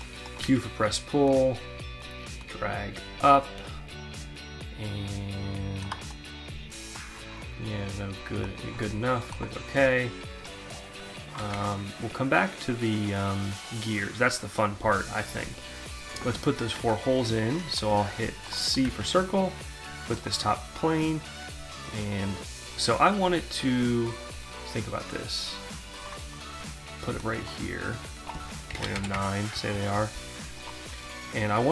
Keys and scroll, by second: 0.0 q, 11.1 alt+Tab, 16.3 alt+Tab, 18.9 c, 28.3 0, 29.0 9, 29.1 Return.